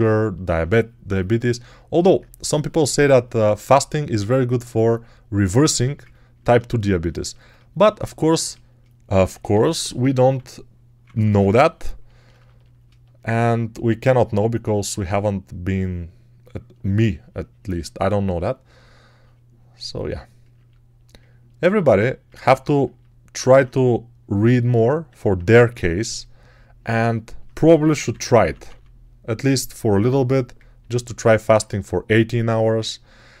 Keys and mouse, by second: 9.2 1, 10.2-11.0 [, 11.2 [, 11.3 [, 27.5-28.6 typing.